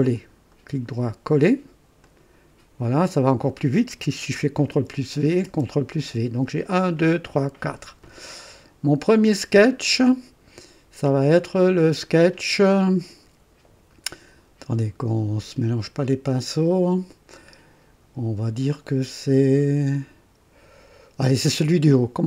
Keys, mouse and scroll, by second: 0.5 right click, 2.0 click, 4.7 ctrl+v, 5.4 ctrl+v, 10.1 click.